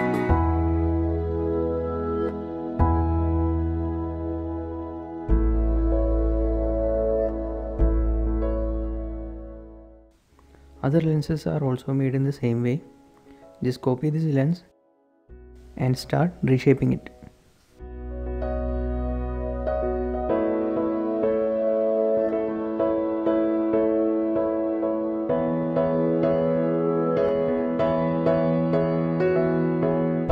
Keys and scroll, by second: 5.6 Right, 5.7 Left, 5.8-7.8 typing, 6.0 Return, 6.4 Right, 6.5 Left, 7.0 Return, 7.4 Tab, 14.1 typing, 16.9 shift+Tab, 17.9 g, 19.4 Tab, 19.4 typing, 20.5-20.9 typing, 21.8 Tab, 21.9-26.8 typing, 27.3 Tab, 27.9 Tab, 28.8 b.